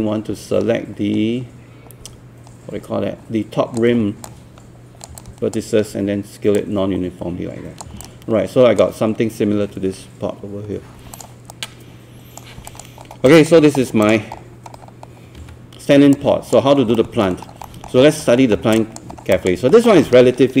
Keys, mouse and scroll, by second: 4.3 click, 5.2 alt+click, 6.6-7.9 drag, 8.0 alt+click, 11.1 click, 11.5 right click, 12.7 click, 13.0 scroll up 1, 13.4 alt+click, 14.5 scroll down 1, 15.4 scroll up 1, 16.1 click, 17.0 alt+middle click, 17.5 alt+scroll down 1, 17.7 alt+middle click, 18.1 scroll up 1, 18.6 alt+scroll up 1, 18.8 click, 19.3 alt+click, 19.8 alt+middle click.